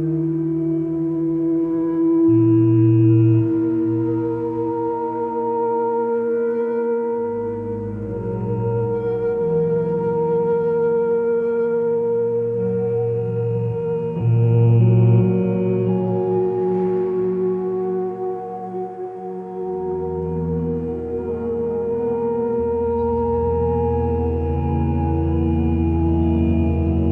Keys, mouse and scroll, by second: 18.8 ctrl+space, 22.5 x, 26.6 ctrl+z.